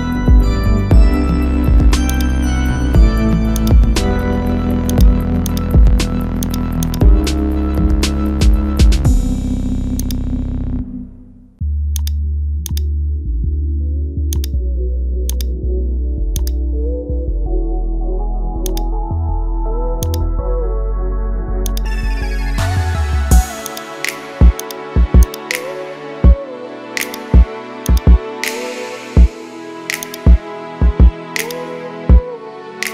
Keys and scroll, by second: 1.2 ctrl+z.